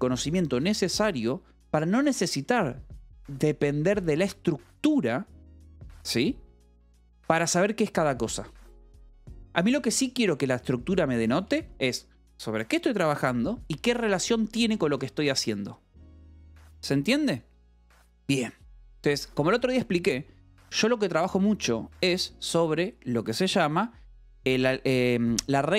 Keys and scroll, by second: 11.3 k, 12.1 shift+v, 13.1 Escape, 13.6-16.3 typing, 15.9 Escape.